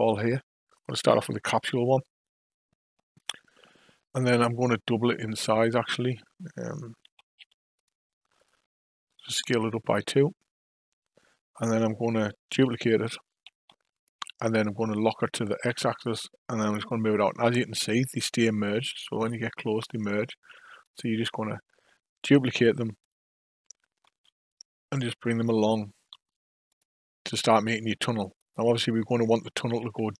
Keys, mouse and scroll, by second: 3.1 click, 7.0 s, 8.3 click, 13.7 shift+d, 22.9 shift+click, 24.0 shift+d, 28.3 click, 29.7 KP_5, 29.9 KP_1.